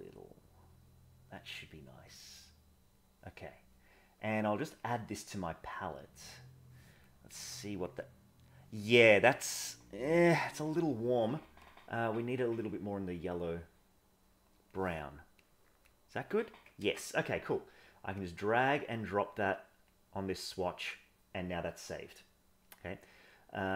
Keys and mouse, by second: 4.7 click, 7.4 click, 10.3 ctrl+z, 15.4 click, 16.8 ctrl+z.